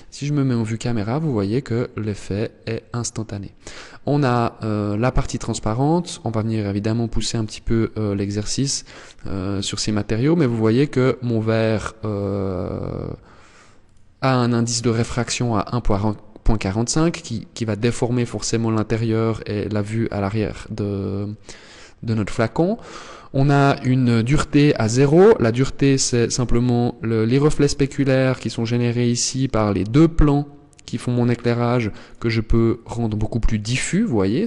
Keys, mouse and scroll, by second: 1.8 scroll up 1, 13.0 click, 31.5 click.